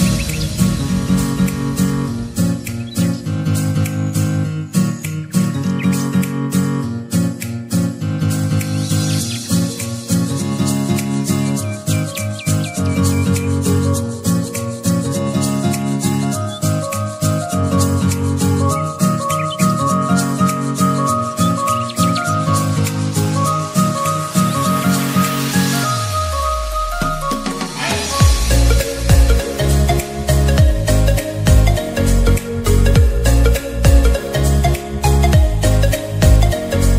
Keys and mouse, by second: 0.5-9.9 drag, 12.7 click, 18.4-22.5 drag, 22.6 click, 26.9-30.5 drag, 33.5-36.9 drag.